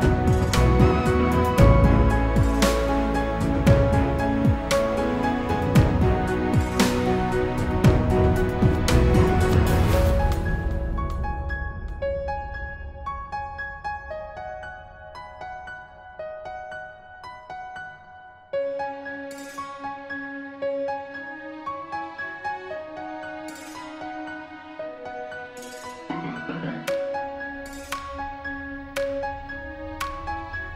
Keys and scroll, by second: 22.5 ctrl+d, 24.1 ctrl+g.